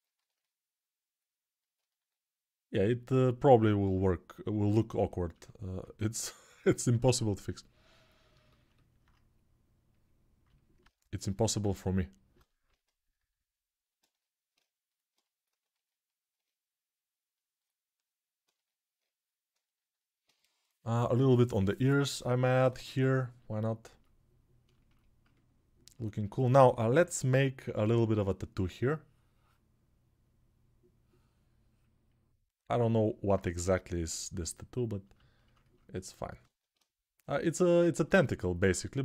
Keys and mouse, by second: 6.2-12.1 alt+drag, 15.2-23.8 ctrl+alt+drag, 23.8-26.3 alt+right drag, 26.7-27.5 [, 35.2-39.0 ctrl+alt+drag.